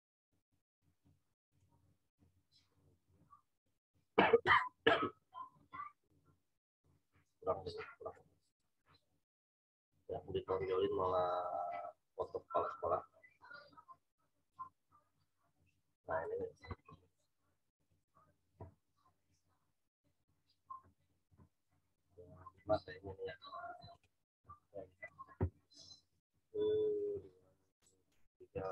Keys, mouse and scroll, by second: 1.4 click, 8.4-12.2 drag, 12.6-13.1 scroll down 1, 14.4 click, 16.2 right click, 17.7 click, 20.2 click, 22.4 click, 24.0 click.